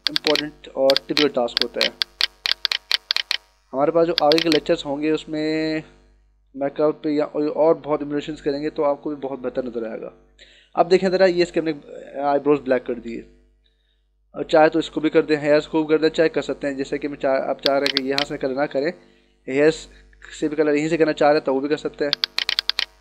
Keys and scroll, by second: 7.7 ctrl+-, 20.0 ].